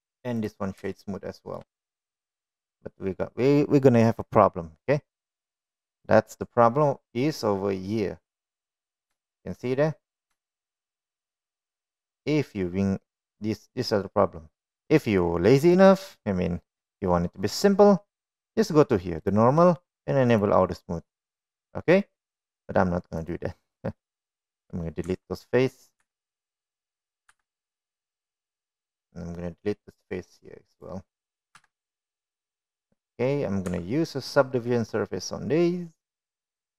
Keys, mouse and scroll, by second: 0.9 right click, 2.3 shift+middle click, 2.9 click, 3.4-4.0 shift+middle drag, 4.8 right click, 8.4-9.7 middle drag, 10.8-11.3 middle drag, 11.7 shift+middle drag, 12.1-12.4 middle drag, 12.9 shift+middle click, 13.5-13.8 middle drag, 18.2 click, 21.8 drag, 22.9 click, 24.0-24.6 middle drag, 25.8 click, 26.3 middle drag, 26.9 middle drag, 27.6 Tab, 28.6 3, 28.8 click, 29.9 Delete, 31.6 middle click, 34.7 Delete, 35.4 middle click, 36.3 Tab.